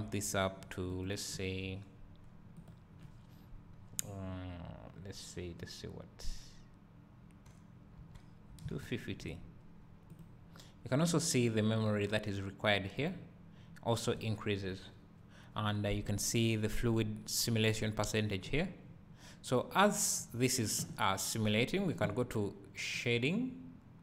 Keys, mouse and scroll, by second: 5.5-16.5 right drag, 16.5 click, 18.8 scroll down 1.